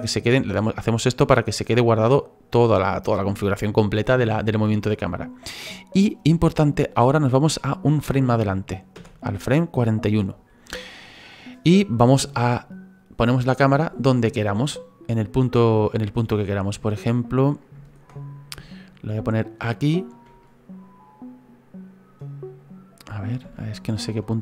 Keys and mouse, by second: 0.6 click, 8.9 Right, 12.1 middle click, 18.6 shift+middle click, 20.4 middle click, 23.5 shift+middle click.